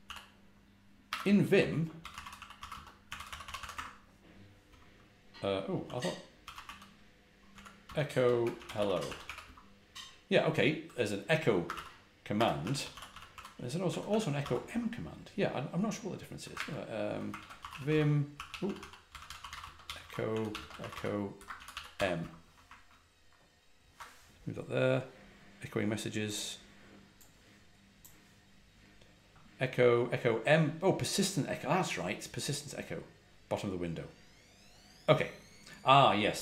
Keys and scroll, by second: 0.0-9.7 typing, 11.6 Escape, 11.7-14.8 typing, 17.3-22.4 typing.